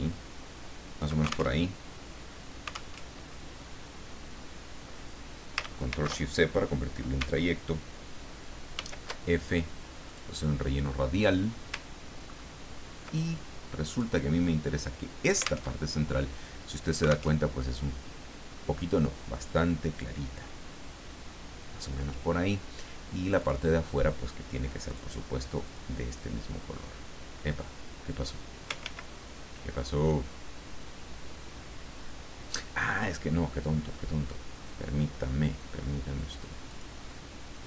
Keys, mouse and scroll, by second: 1.6 ctrl+alt+Tab, 2.9 alt+Tab, 5.9 ctrl+shift+c, 8.7 ctrl+shift+f, 10.0 click, 12.3-12.9 ctrl+scroll up 4, 13.9 click, 15.8 alt+Tab, 17.3 alt+Tab, 20.0-22.7 drag, 23.4 click, 24.9 click, 25.6 click, 28.9 ctrl+z, 36.7 click.